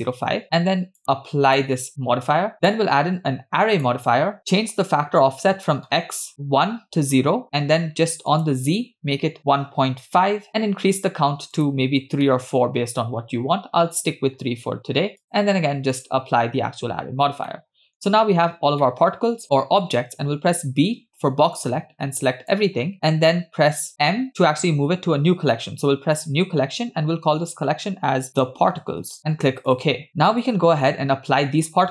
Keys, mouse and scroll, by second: 1.0-1.7 drag, 2.6-3.9 drag, 5.5 click, 8.3-10.2 drag, 11.6 click, 12.3-13.9 middle drag, 15.2-16.1 drag, 17.1-17.6 scroll down 2, 17.6 middle click, 18.8 middle click, 20.4 b, 23.9 m, 30.1 scroll down 1.